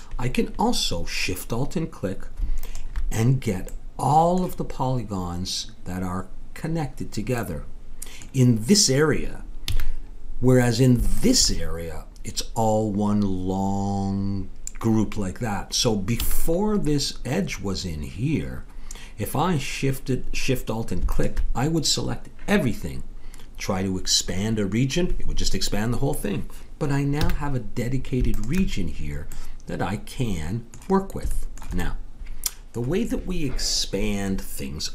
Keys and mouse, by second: 2.6 click, 3.6 right click, 3.7 click, 7.4-8.9 middle drag, 9.6 a, 11.1-13.0 drag, 16.2 a, 21.1-27.2 drag, 27.2 a, 28.3-29.7 drag.